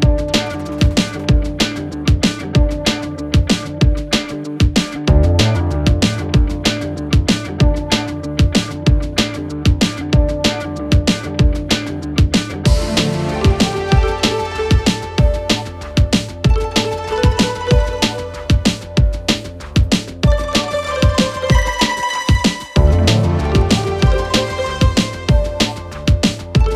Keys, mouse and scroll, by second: 0.0 click, 2.7 Return, 4.6 click, 8.8 s, 9.5 click, 10.8 Return, 12.6 click, 16.4 click, 17.7 Return, 19.3 click, 22.4-24.6 click, 24.9 s, 26.1 click.